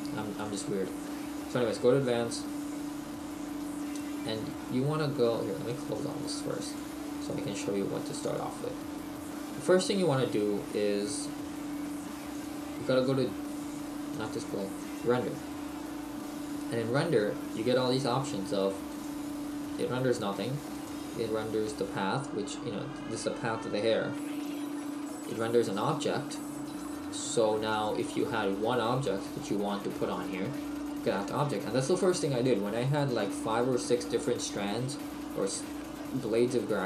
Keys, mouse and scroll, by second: 0.6 click, 18.9 click, 20.7 click, 25.3 click.